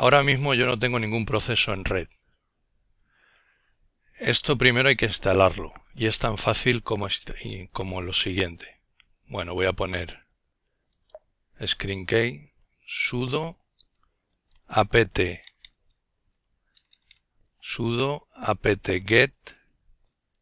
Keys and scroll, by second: 11.3-20.4 typing.